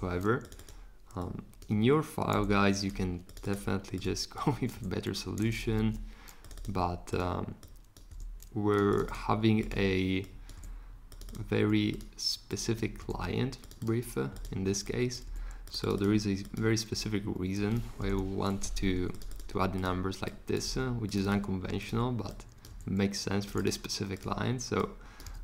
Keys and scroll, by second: 2.3 2, 4.8 2, 5.8 super+z, 8.1 2, 13.0 2, 15.2 2, 16.9 2, 18.0 Return, 20.7 2, 25.2 3.